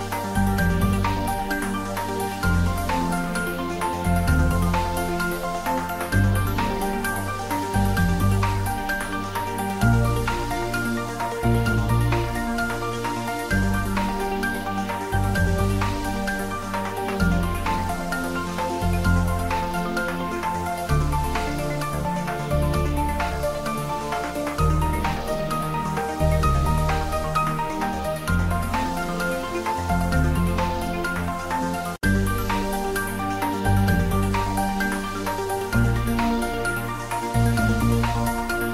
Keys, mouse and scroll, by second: 0.1 ctrl+middle click, 0.8 ctrl+r, 3.1 click, 3.3 s, 5.8 click, 6.5 ctrl+b, 8.2 click, 8.7 alt+e, 9.0 click, 12.5 click, 12.7 middle click, 13.5 ctrl+middle click, 13.9 Tab, 14.1 middle click, 15.2-16.4 ctrl+middle drag, 16.4 Tab, 17.1 ctrl+r, 18.7 click, 19.9 Tab, 20.3 middle click, 21.3 Tab, 21.9 s, 23.1 click, 23.2 ctrl+z, 23.7 middle click, 25.5 ctrl+r, 26.6 click, 28.1 click, 28.4-30.3 middle drag, 30.3 ctrl+r, 31.4 click, 32.1 middle click, 33.0 ctrl+r, 34.1 click, 34.8 Tab, 36.2 ctrl+middle click, 36.6 Tab, 36.8 middle click, 37.5 3, 37.9 click.